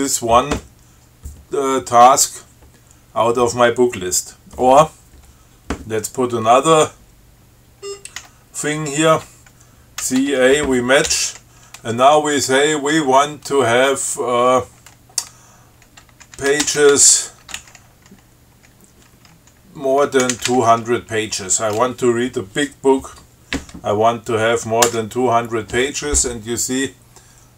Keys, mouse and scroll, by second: 8.1 scroll up 2, 8.4 q, 10.3 ctrl+c, 10.6 ctrl+a, 11.3 m, 16.4-17.9 typing, 20.5 2, 21.2 0, 25.1 Return.